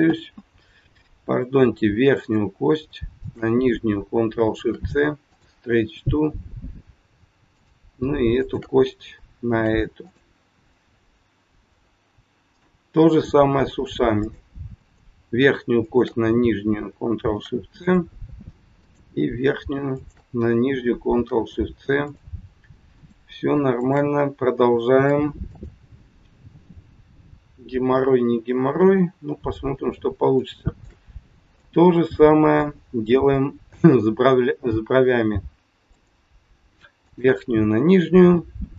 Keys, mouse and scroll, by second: 0.0 ctrl+z, 2.2 click, 3.2 shift+click, 4.5 ctrl+shift+c, 7.4 click, 8.4 shift+click, 9.5 ctrl+shift+c, 11.3 scroll down 1, 11.7 middle click, 14.2 click, 14.6 click, 15.8 shift+click, 16.0 shift+click, 17.3 ctrl+shift+c, 18.8 click, 19.9 shift+click, 21.2 ctrl+shift+c, 22.9 click, 23.8 shift+click, 24.9 ctrl+shift+c, 26.6 middle click, 29.9 scroll down 1, 30.3 shift+middle click, 31.1-31.8 scroll up 3, 31.5 middle click, 35.9 click, 37.1 shift+click, 38.5 ctrl+shift+c.